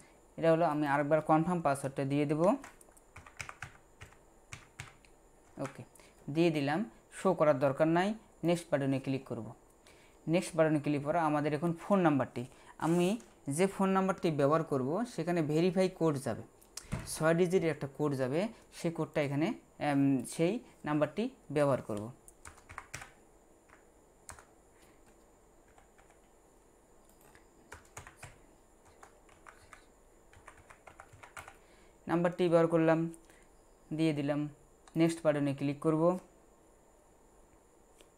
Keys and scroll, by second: 2.4-4.8 typing, 22.5-22.9 typing, 25.7 typing, 25.9 Num_Lock, 28.0-31.4 typing.